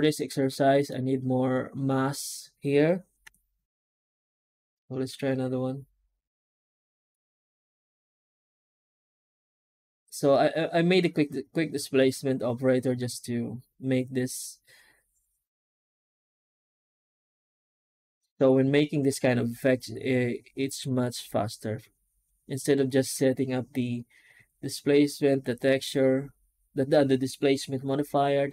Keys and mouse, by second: 0.0-0.7 middle drag, 3.1 F9.